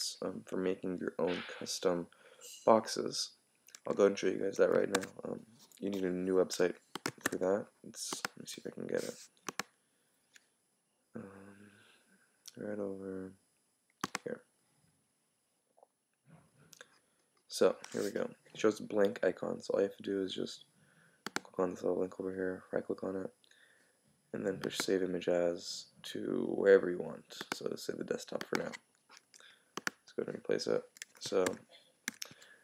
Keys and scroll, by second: 4.9 super+w, 31.5 super+w, 32.1 super+q.